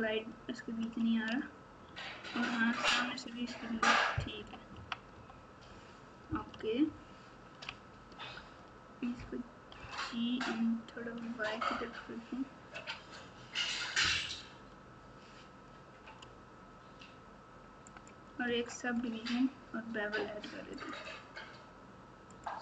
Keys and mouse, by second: 1.9 Tab, 2.6 Tab, 2.9 Tab, 4.3 KP_1, 4.7 KP_3, 5.1 KP_9, 6.8 ctrl+KP_6, 7.3 ctrl+KP_6, 9.8 g, 18.4 Tab, 20.7-22.4 drag.